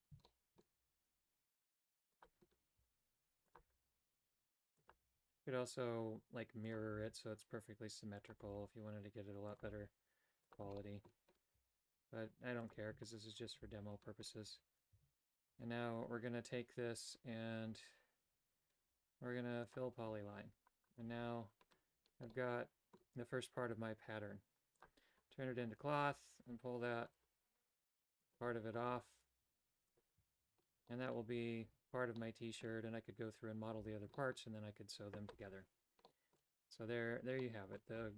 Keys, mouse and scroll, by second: 0.2 shift+middle click, 0.7 e, 2.7 e, 3.6 e, 4.9 e, 6.9 e, 8.4 e, 9.6 e, 10.7 shift+middle click, 11.5 e, 13.3 shift+click, 13.5 f, 14.4 a, 14.9 a, 15.4 Tab, 19.6 click, 20.8 right click, 21.2 Tab, 22.3 middle click, 24.8 click, 25.7 right click, 26.1 g, 28.2 click, 28.8 right click, 29.1 g, 30.2 a, 30.8 middle click, 31.8 Tab, 32.1 middle click, 34.1 shift+middle click, 34.3 typing, 36.1 middle click, 37.4 middle click.